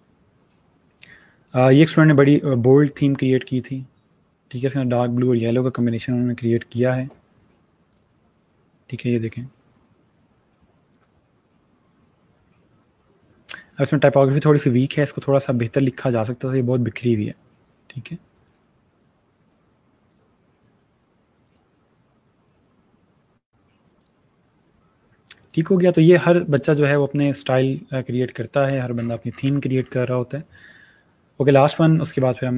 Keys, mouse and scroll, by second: 0.4 click, 7.8 click, 10.8 click, 18.4 click, 23.8 click, 28.1 click, 28.5 scroll down 1, 30.9 click, 32.1 scroll down 1.